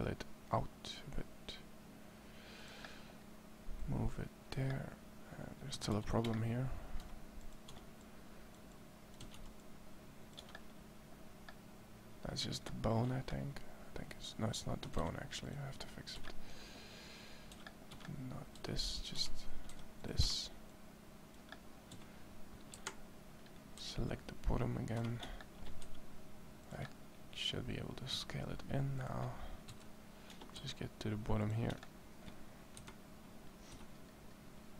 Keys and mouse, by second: 3.6 right click, 5.6 a, 5.7 c, 6.8 c, 9.1 a, 9.1 c, 13.8 middle click, 14.7 a, 14.8 a, 16.2 c, 17.3 c, 18.4 x, 19.5 c, 21.7 a, 22.5 KP_1, 23.5 c, 25.6 e, 27.9 s, 29.5 KP_1, 30.3 e, 31.7 middle click, 32.5 KP_1, 33.5 z.